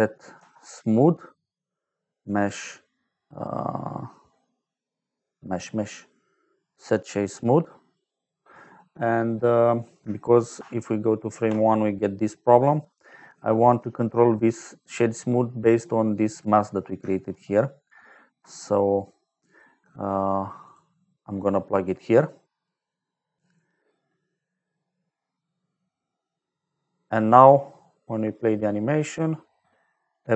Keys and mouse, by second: 0.3 shift+a, 2.1 click, 6.7 click, 7.7 click, 10.5 shift+click, 12.5 middle click, 14.9 middle click, 15.7 click, 18.7 middle click, 20.6 click, 21.1 click, 27.7 click.